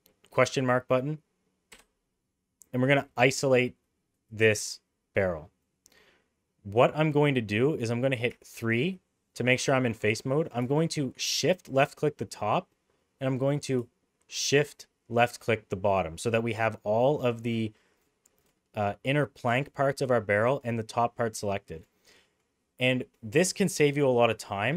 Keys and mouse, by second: 1.7 /, 5.6-6.8 middle drag, 8.3 3, 11.4 shift+click, 12.4-13.7 middle drag, 14.3 shift+click, 15.3 middle click, 21.0 middle click, 21.6 shift+middle click, 22.2 middle click.